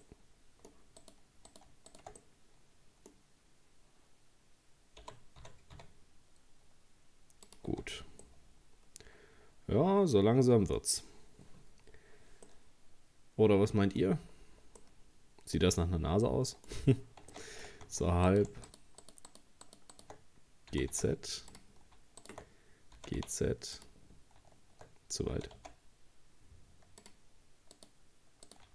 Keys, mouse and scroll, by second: 0.0 middle click, 1.0 right click, 1.5 right click, 1.9 shift+right click, 2.2-5.0 middle drag, 5.0 g, 7.7 Tab, 7.9-8.2 scroll down 2, 8.2-11.0 middle drag, 11.0-12.5 scroll up 2, 12.5-14.3 middle drag, 14.3-14.8 scroll up 5, 14.8 middle click, 15.7-16.2 scroll down 4, 16.2 middle click, 16.7-17.3 scroll up 2, 17.3 shift+middle click, 17.9 Tab, 18.3 right click, 18.7 shift+right click, 19.0 shift+right click, 19.3 shift+right click, 19.7 shift+right click, 19.9 shift+right click, 20.7 g, 22.2 shift+right click, 23.0 g, 25.3 g, 27.8 right click, 28.5 right click.